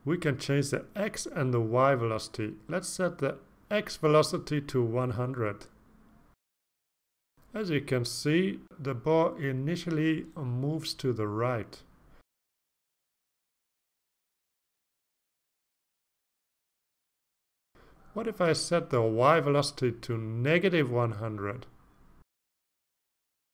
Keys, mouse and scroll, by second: 0.2 KP_0, 1.5 KP_Enter, 3.8 click, 6.4 click, 12.6 click, 14.4 click, 15.7 click, 16.1 click, 17.8 0, 19.5 click, 20.8 -, 21.4 1, 22.0 0, 22.2 0, 23.0 Return.